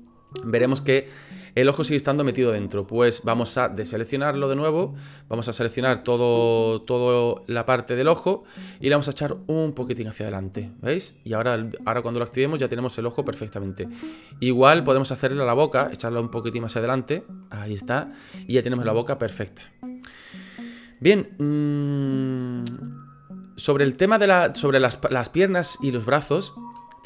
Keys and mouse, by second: 4.4 click, 5.7 shift+click, 6.7-7.7 drag, 8.2 middle click, 9.4-11.9 drag, 12.3 click, 12.7-13.5 middle drag, 14.1 click, 14.5-15.2 drag, 15.2 middle click, 16.0 click, 17.1 click, 17.4-20.0 middle drag, 22.6-26.7 middle drag.